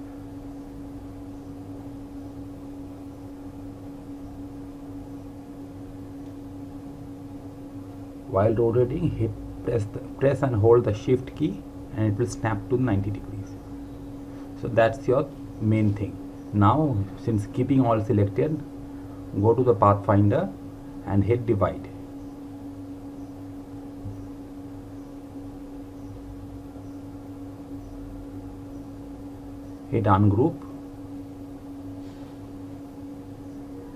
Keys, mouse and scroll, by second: 7.6 click, 19.9 click, 27.9 right click, 29.5 click, 32.2 right click.